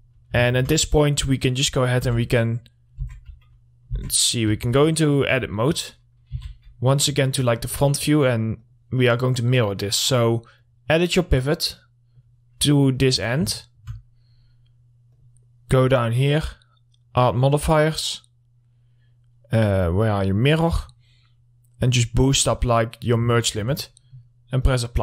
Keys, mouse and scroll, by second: 0.2 middle click, 0.4 scroll down 1, 0.9 alt+middle click, 1.6-2.6 scroll up 1, 2.6 Tab, 5.1 alt+middle click, 7.4 click, 8.0 middle click, 8.3-9.1 scroll up 1, 9.1-13.2 drag, 14.1 alt+middle click, 14.5-14.9 scroll down 1, 15.5 click, 20.6 click, 21.2 middle click, 22.3-23.9 drag, 23.9 alt+middle click.